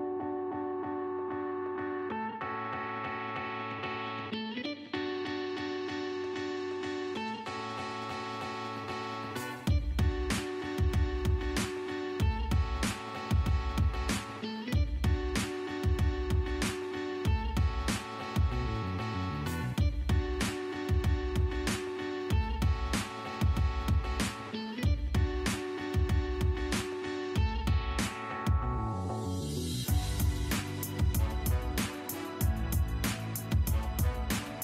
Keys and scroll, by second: 3.6 Escape, 20.9 Escape, 26.9 Escape, 29.7 Escape.